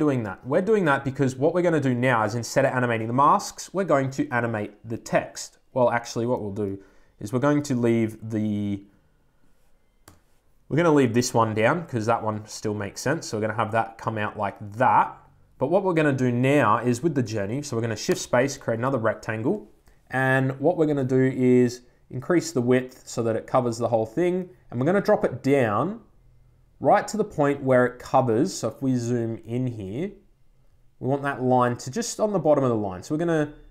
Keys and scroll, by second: 9.9 BackSpace, 19.3 Return.